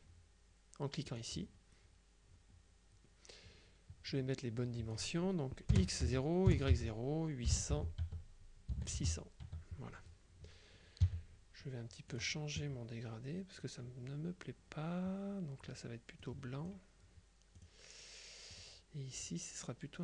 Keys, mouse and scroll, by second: 1.2 click, 4.7 click, 5.8 KP_0, 6.1 Tab, 6.5 KP_0, 6.8 Tab, 7.6 KP_8, 8.1 Tab, 8.8 KP_6, 9.5 Tab, 11.1 g, 12.2 click, 16.3 click, 17.7 click, 18.6 click.